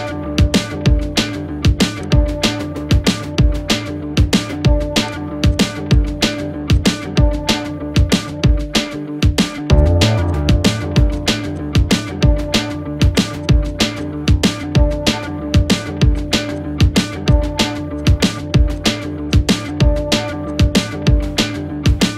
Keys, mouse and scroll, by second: 3.0 ctrl+=, 5.1 click, 13.1 click, 15.0 space, 15.1 click, 15.3 space, 15.7 click, 21.9 space, 22.0 click.